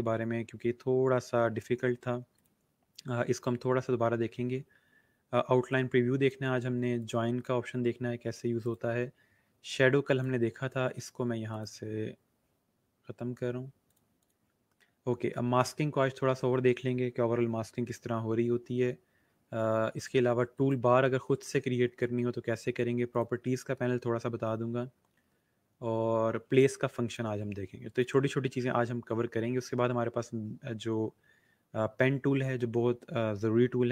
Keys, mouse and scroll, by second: 2.3 click, 5.6 click, 13.8 click, 20.5 click, 23.0 click, 26.4 click.